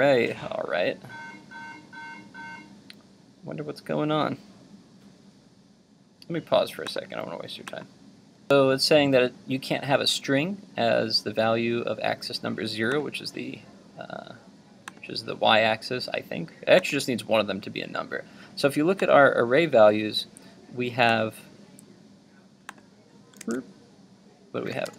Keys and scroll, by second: 23.4 super+Tab.